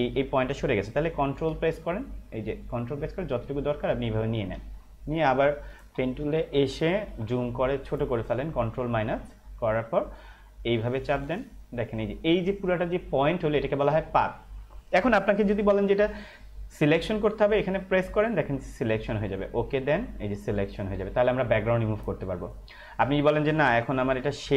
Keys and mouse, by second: 2.7 ctrl+click, 4.7 space, 4.8 click, 5.2 space, 5.8 p, 6.4 ctrl+-, 7.8 space, 9.5 click, 18.2 click.